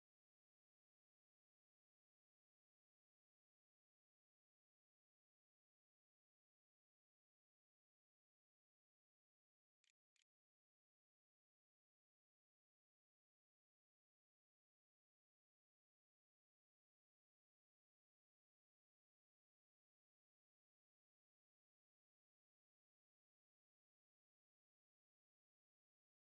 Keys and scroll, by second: 8.6-11.2 typing.